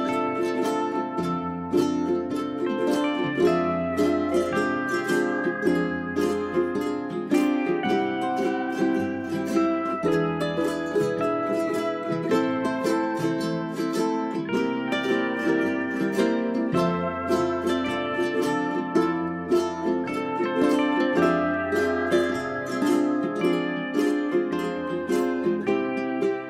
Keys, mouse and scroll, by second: 0.3-1.0 scroll up 1, 1.0 click, 1.9 right click, 2.5 click, 4.7 scroll up 1, 5.8-8.8 ctrl+drag, 9.3 j, 9.7 click, 11.1 scroll down 1, 11.6-12.9 scroll up 1, 12.9 click, 14.0 g, 14.2-18.4 drag, 18.4-18.7 scroll down 1, 18.7-19.2 scroll up 1, 20.3 w, 22.2-26.4 drag.